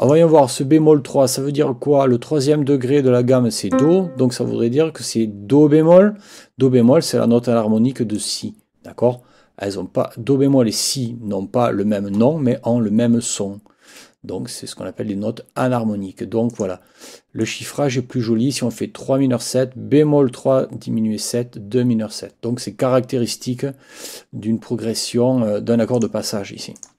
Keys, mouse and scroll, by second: 0.0 click, 3.7 click, 8.2 click, 16.5 click, 17.4 click, 25.9 click, 26.8 click.